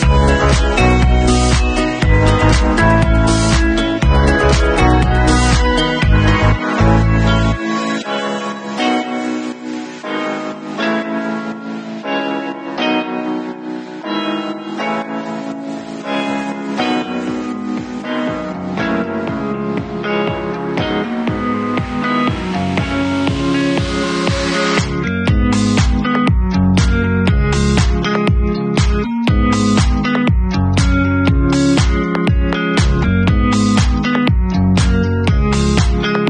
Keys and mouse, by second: 9.8-11.9 middle drag, 11.9-20.6 drag, 20.6 middle click, 21.2 w, 21.9 shift+z, 22.8 alt+middle click, 23.7-25.7 drag, 25.7-29.5 middle drag, 29.5-33.0 drag, 33.0 middle click, 33.5-35.5 alt+drag, 34.2 shift+z, 35.5 middle click.